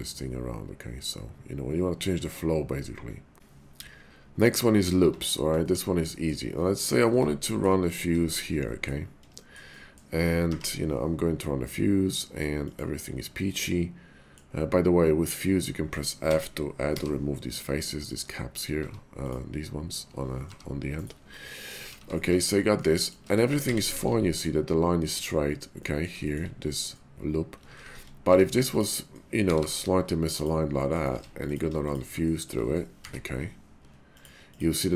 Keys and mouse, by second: 3.3 y, 5.0 Tab, 5.6 shift+click, 6.1 click, 6.8 click, 7.1 Tab, 7.5 shift+click, 7.8 click, 8.2 shift+click, 8.6 click, 9.3 shift+middle click, 9.7 middle click, 10.5 y, 13.4-16.4 middle drag, 16.9 f, 18.1 click, 18.7 Tab, 19.2 click, 20.3 g, 21.0 click, 21.2 middle click, 22.0 ctrl+z, 22.2 ctrl+z, 22.8 click, 23.5 ctrl+shift+z, 23.8 ctrl+shift+z, 24.3 click, 25.8 click, 26.2 shift+click, 27.6 ctrl+z, 27.8 ctrl+z, 28.2 Tab, 28.6 click, 29.4 g, 29.6 g, 30.4 click, 30.7 middle click, 31.1 Tab, 31.4 click, 31.8 shift+click, 32.2 shift+click, 32.2 shift+middle click, 33.0 y.